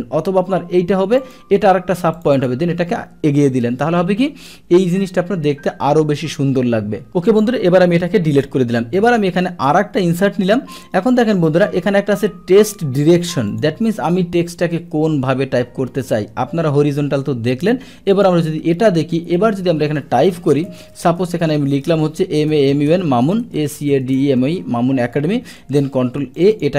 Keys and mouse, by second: 1.2 click, 2.1 click, 2.3 click, 7.3 click, 8.1 Delete, 9.0 click, 9.7-10.8 drag, 13.5 click, 18.1 click, 20.4 BackSpace, 20.6 BackSpace, 21.6 BackSpace, 25.4 ctrl+a, 26.4 click, 26.5 click, 26.7 click.